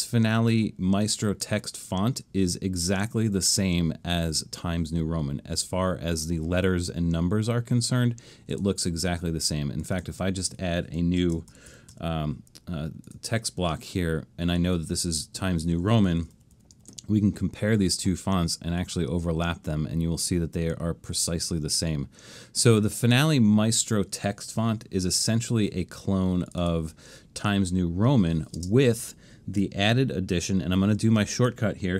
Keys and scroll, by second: 11.1-12.5 typing, 16.4 super+=, 16.6 super+=, 16.8 super+=, 25.2 BackSpace, 28.6 space, 29.6 super+space.